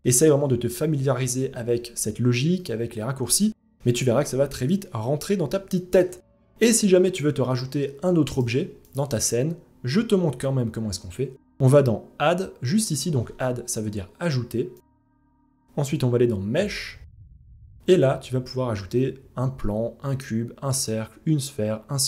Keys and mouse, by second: 0.6 ctrl+z, 2.1-3.0 middle drag, 5.3 shift+middle drag, 7.0 middle click, 8.0 g, 14.3-22.0 drag.